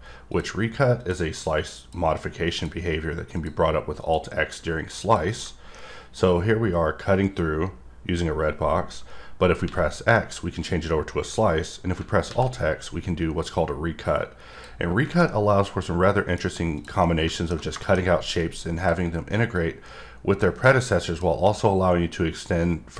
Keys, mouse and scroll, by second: 0.3 click, 1.8 click, 2.5 click, 3.4 click, 4.0 click, 5.0 click, 5.2 double click, 5.7 middle click, 14.5 click, 14.8-15.2 scroll down 2, 15.2 middle click, 16.4 scroll up 1, 16.7 click, 17.0 middle click, 17.8 middle click, 18.0-18.7 scroll up 2, 18.8 click, 19.5 click, 20.6 middle click.